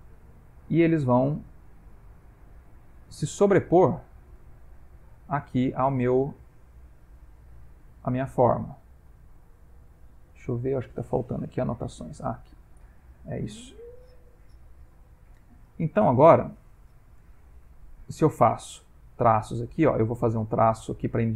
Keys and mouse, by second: 0.7 click, 3.5 click, 4.4 click, 6.5 ctrl+middle click, 8.4 click, 12.5 ctrl+middle click, 14.5 ctrl+z, 14.9 ctrl+z, 15.2 ctrl+z, 15.6 ctrl+z, 17.2 click, 19.7 click.